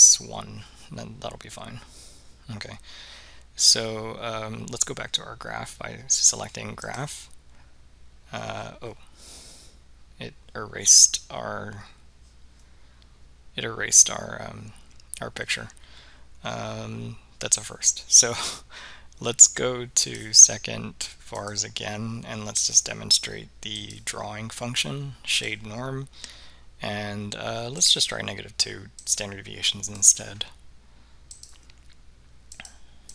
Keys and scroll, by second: 23.9 Right, 25.5 Return, 29.1 2, 30.1 Return, 31.4 2, 32.6 Return.